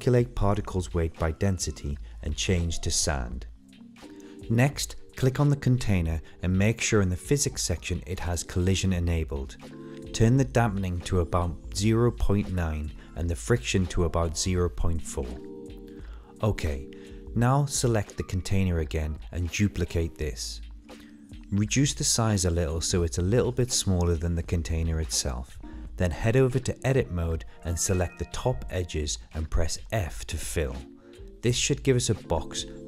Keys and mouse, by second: 1.7 click, 2.1 drag, 6.4 click, 6.9 click, 9.7 middle click, 10.3 middle click, 11.8 shift+d, 13.8 s, 16.7-17.6 middle drag, 19.7 Tab, 23.1 click, 27.4 ctrl+shift+click, 28.5 ctrl+shift+click, 29.8 f, 31.5 Tab.